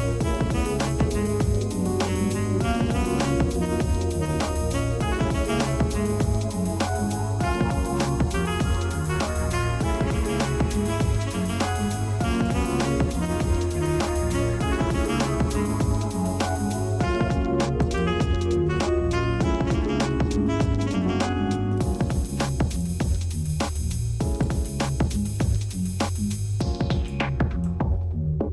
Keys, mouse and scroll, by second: 0.8 click, 1.4 middle click, 2.0 shift+middle click, 2.7 middle click, 3.4 shift+middle click, 4.3 Tab, 5.6 click, 6.4 click, 9.1 click, 12.4 click, 13.0 shift+middle click, 15.6 shift+middle click, 17.8 alt+shift+right click, 19.1 shift+middle click, 20.4 shift+middle click, 21.2 shift+middle click, 21.9 z, 23.9 alt+shift+right click, 24.9 alt+shift+right click, 25.8-27.3 ctrl+shift+right drag, 27.8-28.5 ctrl+alt+shift+right drag.